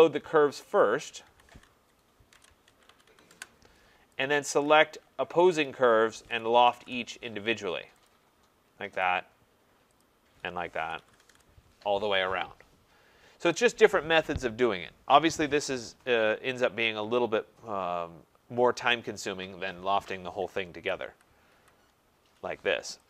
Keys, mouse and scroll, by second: 0.8 shift+click, 1.7-3.1 typing, 3.3 Return, 4.2 click, 5.5 shift+click, 6.2-6.9 typing, 8.1 click, 9.0 click, 10.0 shift+click, 10.7-11.5 typing, 13.7 click, 20.5 click, 20.8 ctrl+z, 21.1 ctrl+z, 21.5 ctrl+z.